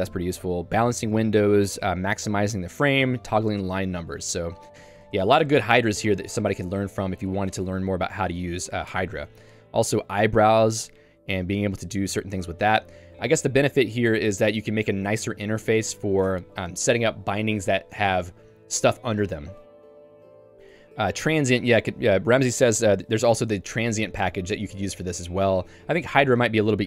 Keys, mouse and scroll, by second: 3.0 k, 5.7 Tab, 6.1 k, 8.0 j, 8.7 k, 8.9 Tab, 9.7 j, 12.8 k, 14.8 j, 16.3 Tab, 20.2 j, 20.7 Escape.